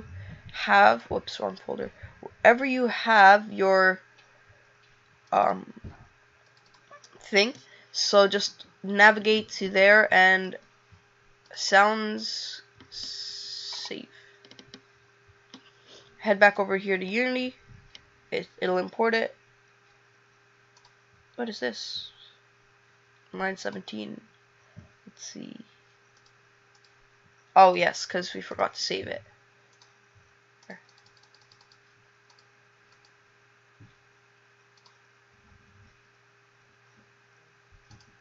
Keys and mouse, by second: 32.3 click, 32.9 click.